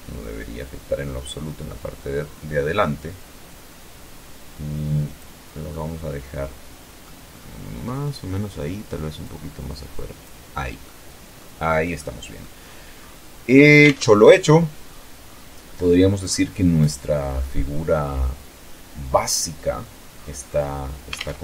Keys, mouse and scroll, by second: 4.3-5.8 middle drag, 6.3 middle click, 6.4-7.1 scroll up 2, 7.8-9.0 drag, 9.1 scroll down 1, 9.4 middle click, 10.6 middle click, 11.1 scroll down 1, 11.6 scroll up 1, 12.1 scroll up 2, 12.4 alt+Tab, 13.3-14.1 scroll down 4, 14.3-14.8 scroll up 2, 14.8-15.1 scroll down 2, 15.8-16.2 scroll up 2, 16.4 scroll up 2, 18.2-19.0 scroll down 4, 19.0 scroll up 2, 19.7 alt+Tab, 20.6 Tab, 21.0-21.4 scroll down 1.